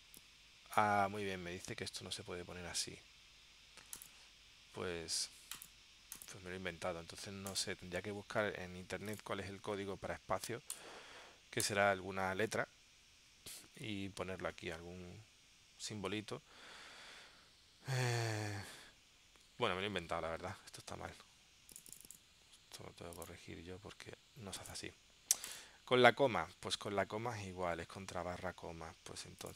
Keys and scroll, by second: 20.1 super+Tab, 28.2 super+Tab.